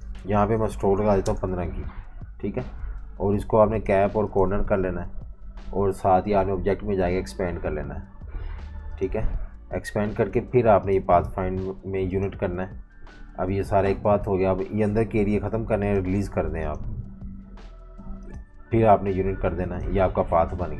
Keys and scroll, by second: 0.5 1, 0.9 5, 1.2 Return.